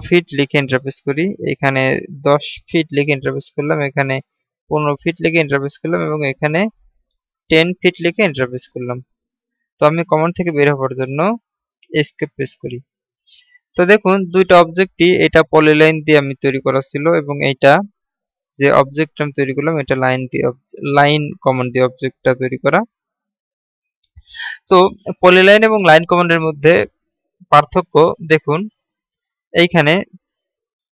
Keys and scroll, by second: 11.0 Escape.